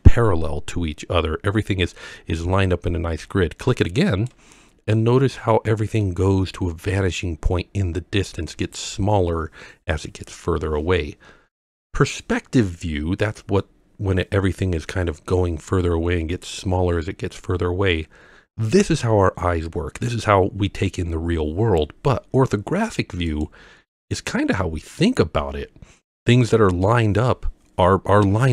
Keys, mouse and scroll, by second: 4.1 click, 4.9-6.0 middle drag, 23.3 click, 24.0-24.4 scroll down 3.